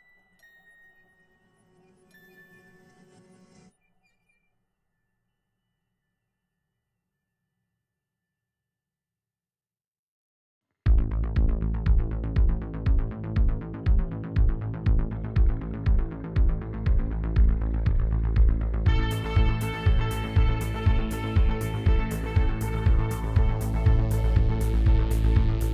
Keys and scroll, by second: 1.2 z, 5.5 ctrl+b, 11.3 ctrl+b, 11.8 ., 12.1 0, 13.0 Return, 23.7 2.